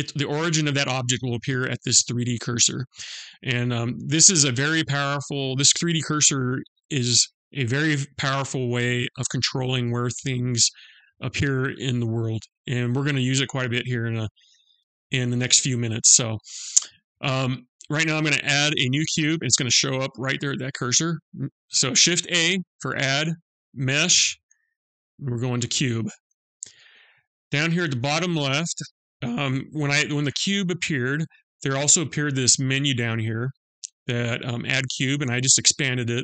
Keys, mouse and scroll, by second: 19.7 shift+a, 28.4 click, 33.0 click, 35.0 click.